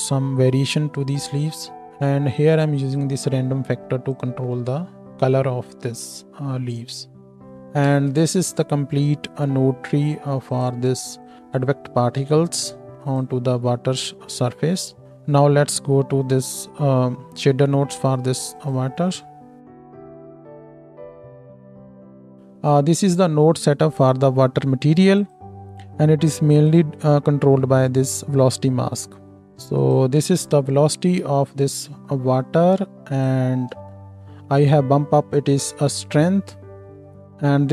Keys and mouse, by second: 1.9-9.0 middle drag, 6.5 space, 7.4 ctrl+space, 7.9 ctrl+space, 10.6-11.2 drag, 13.1-18.7 ctrl+drag, 14.1 ctrl+space, 18.7 middle click, 19.6 click, 20.3-22.4 drag, 22.4 middle click, 22.7-25.3 drag, 25.3-26.6 middle drag, 26.6-30.0 drag, 30.0-33.1 ctrl+shift+middle drag, 33.1 ctrl+shift+click, 33.3-37.7 ctrl+shift+middle drag.